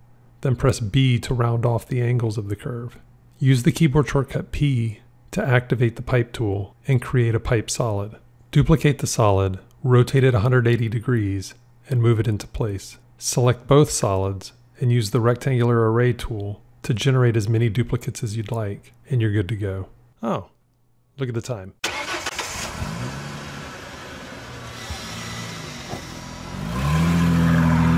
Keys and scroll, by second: 0.5 b, 3.6 p, 9.6 r, 11.8 g.